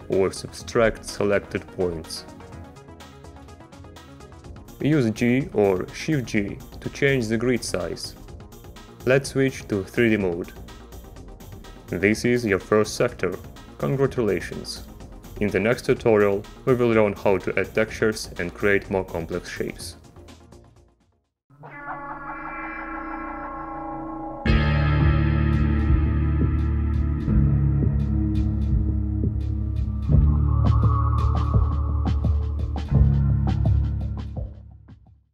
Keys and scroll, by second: 5.4 g, 6.7 shift+g, 9.8 Return, 11.5 Down.